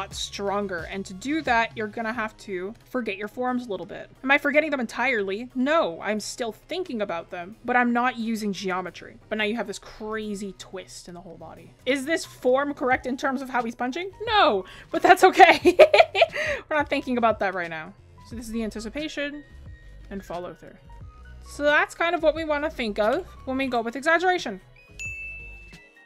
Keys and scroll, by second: 4.6 ctrl+z, 6.8 ctrl+z, 8.4 ctrl+z, 9.9 ctrl+z, 14.8 ctrl+z, 20.0 ctrl+z.